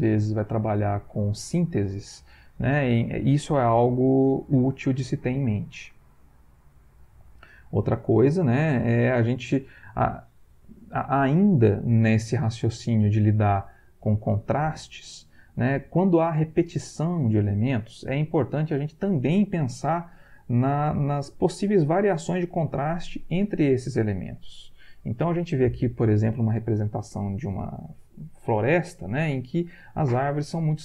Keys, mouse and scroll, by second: 6.4 Right.